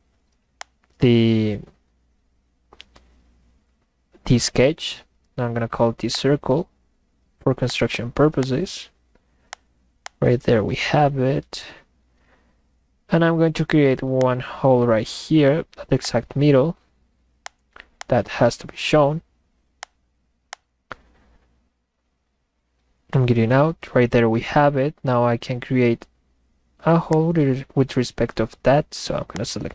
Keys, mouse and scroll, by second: 0.6 click, 6.2 click, 7.7 click, 8.4 click, 9.5 click, 10.0 click, 14.2 click, 16.0 click, 17.5 click, 18.0 click, 19.8 click, 20.5 click, 27.1 click, 29.4 click.